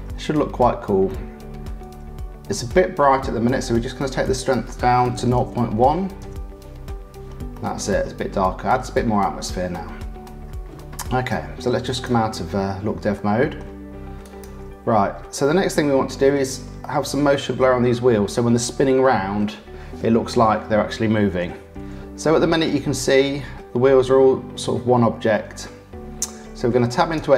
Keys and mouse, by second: 0.2 middle click, 1.1-2.5 middle drag, 4.2-6.6 drag, 7.6-9.3 middle drag, 9.7 click, 13.1 click, 14.2 click, 15.4 click, 16.3 middle click, 16.8 click, 21.4 r.